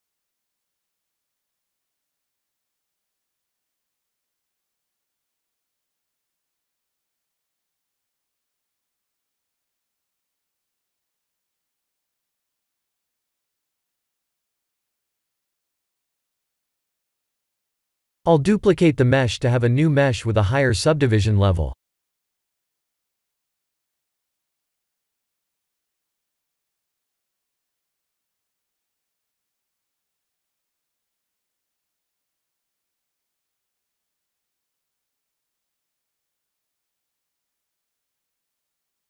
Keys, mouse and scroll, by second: 0.0 shift+z, 0.3 middle click, 2.0 click, 4.2 click, 5.1 click, 8.3 click, 10.1 click, 10.7 middle click, 13.0 shift+z, 13.4 shift+z, 14.4 Tab, 14.9 middle click, 15.7-16.6 scroll down 7, 16.6 click, 17.0 shift+middle click, 17.7 click, 18.0 middle click, 20.6 click, 21.4 b, 24.0 KP_7, 25.3 shift+d, 27.9 g, 31.5 middle click, 32.6 click, 33.1 middle click, 33.7 ctrl+3, 34.0 middle click, 35.0 right click, 36.9 middle click.